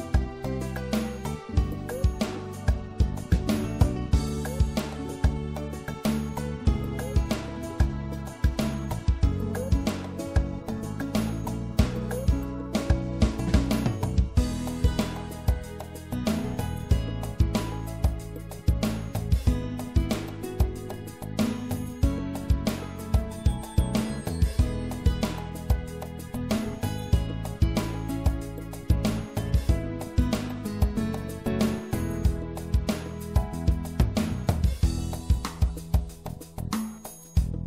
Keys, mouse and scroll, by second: 0.4 middle click, 1.1 click, 1.2-2.3 middle drag, 2.6 right click, 3.1 middle click, 3.8 right click, 4.2-5.4 middle drag, 5.4-7.2 drag, 10.6 ctrl+z, 12.7 right click, 13.6 click, 15.4 click, 16.8-19.1 middle drag, 26.8-31.8 drag, 27.3-29.8 right drag, 29.9 right click, 34.4-37.6 drag.